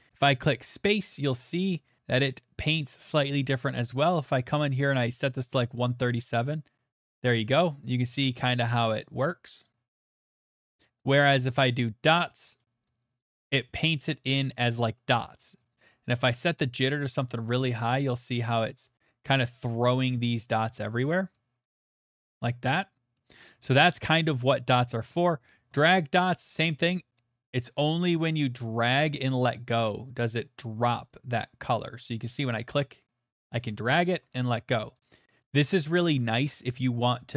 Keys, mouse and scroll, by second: 0.2 click, 1.9 click, 4.3 click, 5.1 middle click, 5.7 middle click, 10.2 click, 10.7 click, 11.5 click, 11.6 click, 12.6 click, 13.2 click, 14.9 middle click, 15.6 click, 16.5 click, 17.2 middle click, 18.0 click, 18.8 click, 21.3 click, 21.8 click, 23.1 middle click, 24.4 click, 25.2 click, 26.1 middle click, 30.7 right click, 31.4 middle click, 32.1 middle click, 34.1 right click, 35.4 right click, 36.9 click.